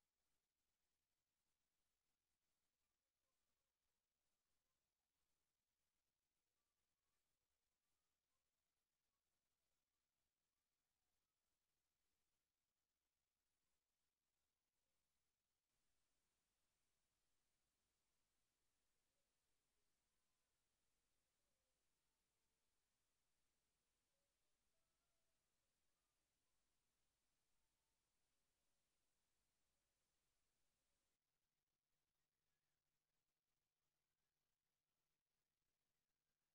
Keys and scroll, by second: 2.8 ctrl+c, 4.2 ctrl+v, 8.2 ctrl+c, 9.7 ctrl+v, 16.0 ctrl+c, 18.0 ctrl+v.